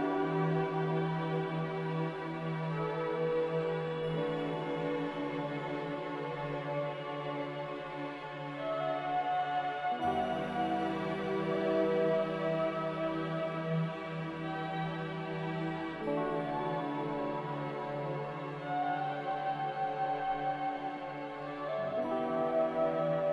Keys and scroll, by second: 7.2 5, 7.3 0, 7.6 Return, 10.9 a.